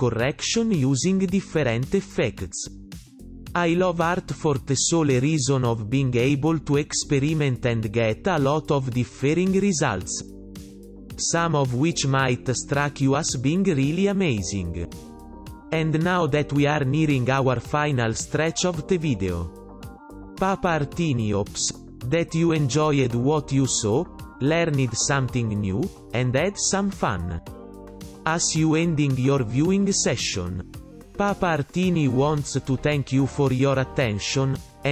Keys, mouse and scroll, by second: 2.3 right click, 2.7 right click, 5.0 ctrl+alt+], 7.3 ,, 10.0 [, 10.9 ctrl+alt+], 11.9 right click, 12.2 right click, 14.8 [, 15.3 ,, 15.5 [, 16.5-17.8 typing, 16.7 right click, 18.3 right click, 18.5 right click, 25.1 ,, 25.7 ,, 28.0 right click, 28.4 right click, 28.6 right click, 29.1 right click, 29.9 ,, 31.2 ,, 31.3 ,, 32.8 ,, 33.2 right click, 33.8 right click.